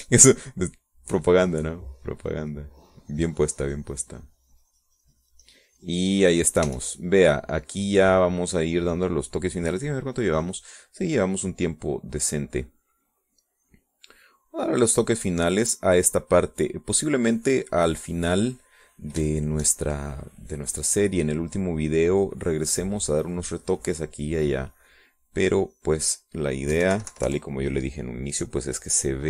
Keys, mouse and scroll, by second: 1.3 e, 1.8-8.1 drag, 8.1 e, 8.3-10.4 drag, 11.2 click, 11.8 click, 13.0-19.6 drag, 19.9 middle click, 20.7 shift+middle click, 21.6-27.6 drag, 27.6 middle click, 28.2 KP_5, 28.4 KP_Subtract, 29.2 middle click.